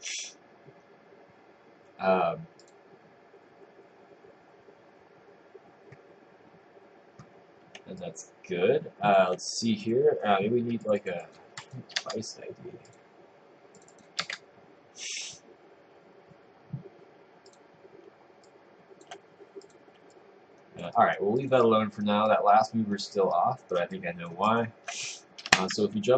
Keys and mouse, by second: 8.0 click, 12.1 Return, 14.3 Return, 18.5 click, 20.2 click, 21.0 right click, 21.4 click, 21.7 right click, 22.3 click, 23.3 right click, 24.0 click, 24.5 click, 25.6 ctrl+Tab.